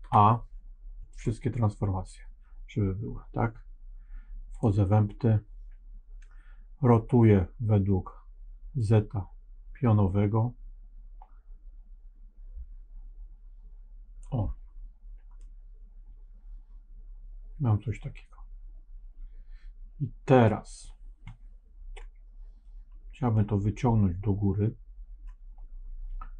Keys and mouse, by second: 4.4 click, 8.8-14.1 drag, 15.3-20.4 middle drag, 23.2-25.2 middle drag.